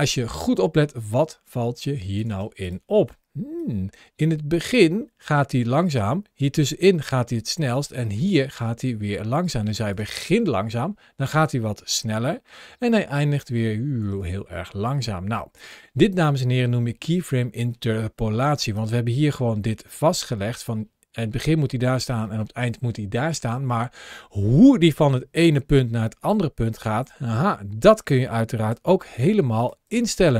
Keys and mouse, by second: 2.1 space, 2.4 click, 3.4-9.8 drag, 9.8 space, 13.8 space, 15.5-17.4 drag, 18.1 ctrl+shift+a, 29.4 click, 29.7 n.